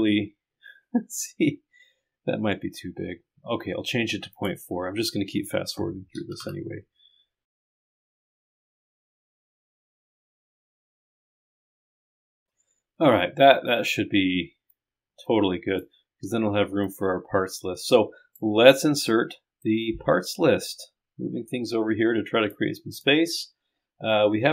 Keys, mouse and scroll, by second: 4.3 click, 7.5 click, 7.6-8.0 scroll down 2, 7.7 click, 8.4 click, 8.7 click, 8.9 click, 9.6 click, 10.0 click, 11.9 click, 14.7 click, 19.1 click, 20.7-22.9 right drag, 23.0 right click.